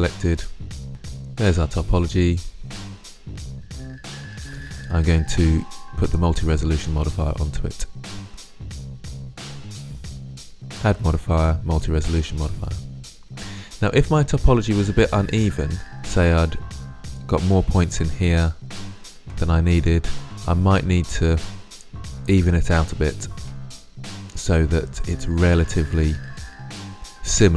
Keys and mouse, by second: 0.9 Tab, 4.5 Tab, 8.5-10.5 drag, 13.3-13.9 middle drag, 13.9 Tab, 14.8-16.4 middle drag, 18.7-20.8 middle drag, 21.1-24.9 middle drag.